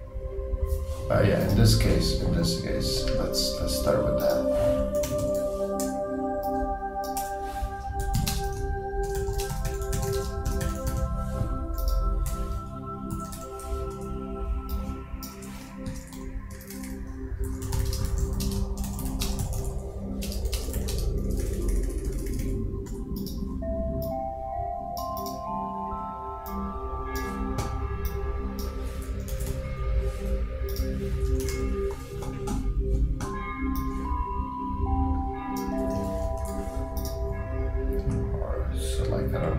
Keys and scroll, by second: 7.8-11.2 typing, 15.6 shift+Return, 15.9 shift+s, 17.2 shift+BackSpace, 17.5 shift+o, 18.6 shift+space, 18.8 shift+b, 19.3 shift+space, 35.9-36.8 typing.